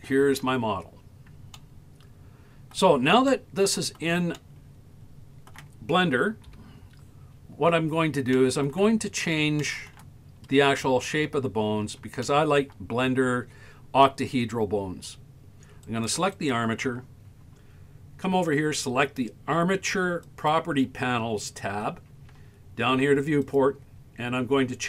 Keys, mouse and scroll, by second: 0.8-1.3 scroll down 5, 1.6-2.8 shift+middle drag, 3.3-4.0 middle drag, 4.4-5.6 shift+middle drag, 6.6 KP_1, 7.6-7.9 scroll down 7, 8.3 shift+middle click, 9.1 scroll up 2, 9.6-9.9 shift+middle drag, 10.3-10.7 scroll up 3, 10.8 shift+middle click, 11.6-12.0 scroll up 2, 12.3-12.6 shift+middle drag, 13.1-13.5 scroll up 2, 15.9 right click, 16.4 right click, 20.2 click, 23.4 click.